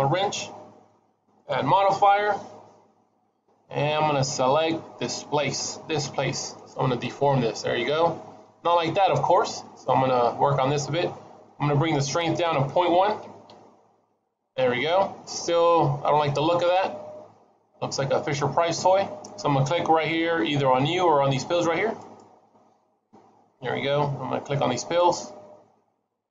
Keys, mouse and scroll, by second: 1.3 click, 7.3-8.6 scroll down 2, 8.6 middle click, 12.0 click, 14.6 scroll up 2, 14.8 middle click, 16.2 middle click, 21.9 click, 24.6 click.